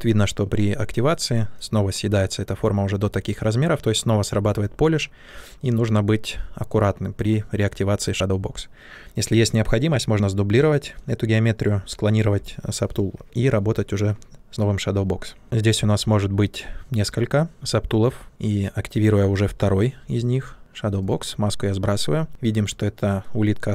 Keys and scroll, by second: 5.2 ctrl+z.